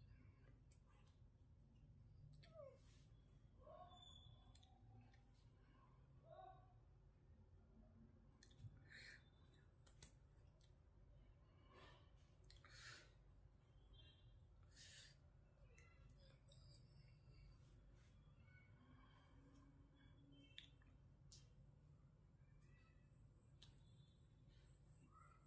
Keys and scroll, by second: 0.0-1.0 typing, 1.4 Down, 2.8 Return, 9.1 ctrl+c, 18.2 ctrl+v, 22.0 Return.